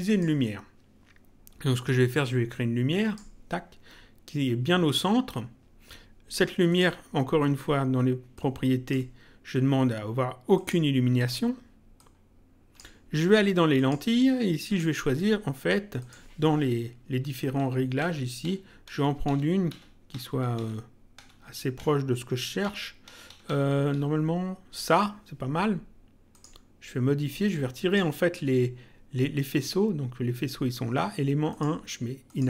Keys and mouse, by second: 0.0 click, 1.8 click, 6.6 click, 8.3 click, 10.5 click, 11.9 click, 13.7 click, 15.9 click, 17.2 Down, 23.8 Up, 26.2 click, 27.4 click, 31.4 click.